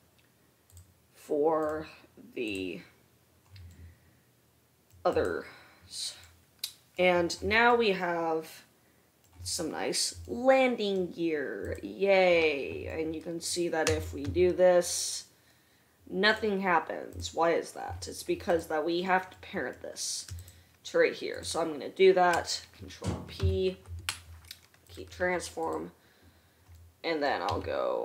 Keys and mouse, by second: 1.9-5.3 middle drag, 5.3 click, 5.7-11.9 middle drag, 11.9 click, 12.3-18.7 middle drag, 14.2 r, 18.7 click, 19.0-20.6 middle drag, 20.6-21.1 shift+drag, 21.7 shift+click, 23.7 ctrl+p, 25.8 click, 27.9 r.